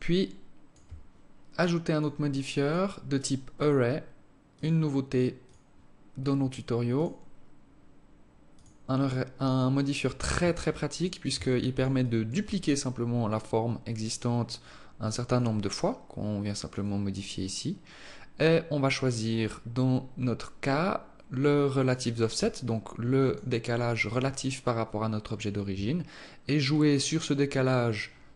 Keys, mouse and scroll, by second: 1.7 click, 2.4 click, 4.3 click, 5.3 click, 6.7 click, 9.5 alt+click, 10.1 alt+click, 11.2 alt+shift+click, 11.8 alt+click, 13.8-14.1 scroll down 2, 15.1 click, 15.7 click, 16.5 click, 16.9 click, 18.6-19.9 scroll up 4, 22.5 alt+click, 23.5 alt+click, 26.5 shift+click.